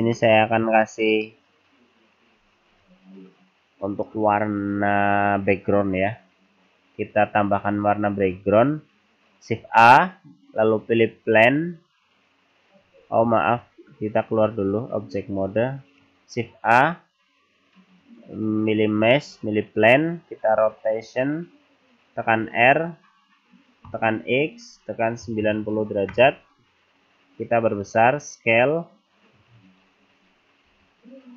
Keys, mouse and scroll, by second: 0.2 middle click, 0.8-1.2 scroll down 3, 2.7 click, 9.7 shift+a, 13.2 ctrl+z, 14.6 Tab, 15.4 click, 16.4 shift+a, 20.6 r, 26.6-27.4 scroll down 4, 27.9 s, 30.7 g.